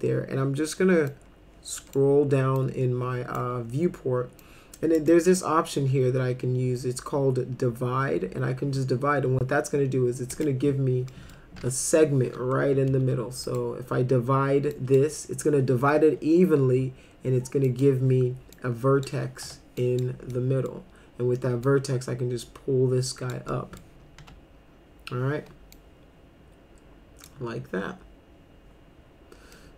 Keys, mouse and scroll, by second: 1.1 click, 2.6 click, 4.4-5.0 drag, 5.1 click, 10.3 click, 11.1 middle click, 11.6 F3, 12.9 ctrl+z, 13.4 click, 14.7 drag, 17.7 click, 18.5-19.0 drag, 19.4 1, 19.8 click, 20.3-20.7 middle drag, 21.7-23.3 drag, 23.5 middle drag, 24.2 F3, 25.7-27.2 drag, 29.5 middle click.